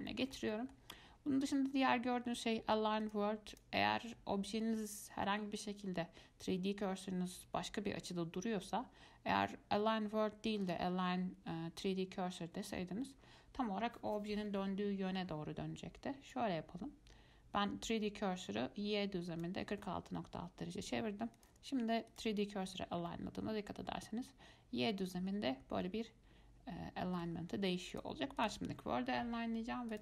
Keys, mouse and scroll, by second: 0.3-3.2 shift+middle drag, 3.2 click, 10.8-13.9 drag, 16.5-19.5 drag, 21.6-23.3 drag, 23.3-26.3 middle drag, 28.1-30.0 drag.